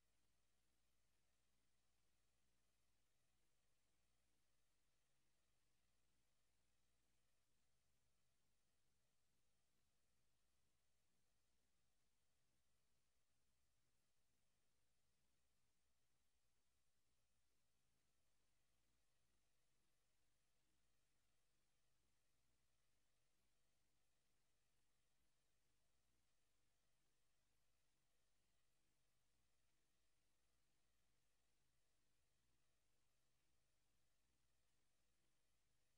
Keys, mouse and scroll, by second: 3.7 click, 7.2 click, 18.2 Escape, 18.9 scroll down 1, 22.1 s, 22.9 click, 23.7 middle click, 25.3 click, 27.1 click, 28.5 shift+d, 29.7 click, 32.6 click, 33.3 shift+d, 34.7 click, 35.5 r.